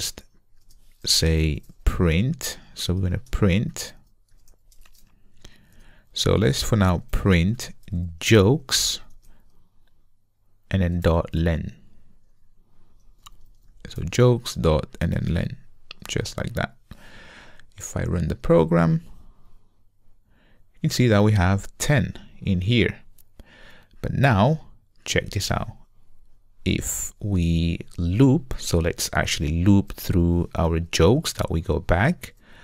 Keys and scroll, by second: 5.8 Return, 11.0 Return, 16.2 Return.